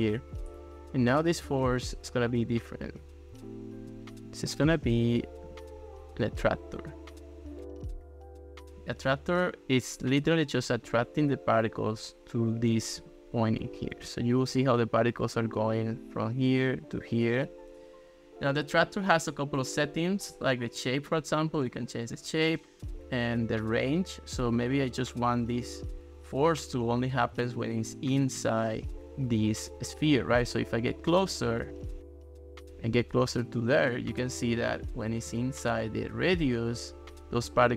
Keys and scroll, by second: 13.1 ctrl+s, 14.1 ctrl+x.